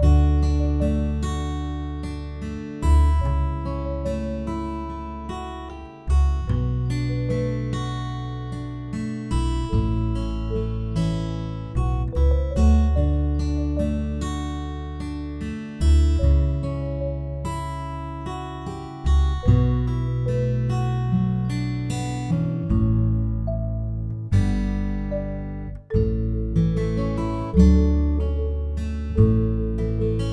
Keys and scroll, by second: 0.0 ctrl+s, 0.2 -, 7.8 End, 11.3 End, 18.2 -, 27.2 +, 27.6 space, 30.2 ctrl+s.